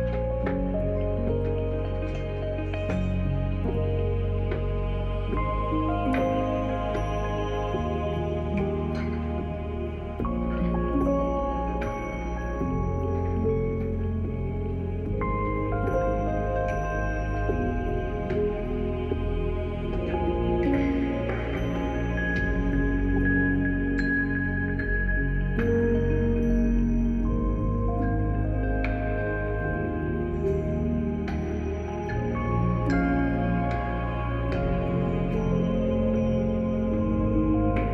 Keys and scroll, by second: 16.3 e, 17.0 b, 36.5 b, 37.7 b.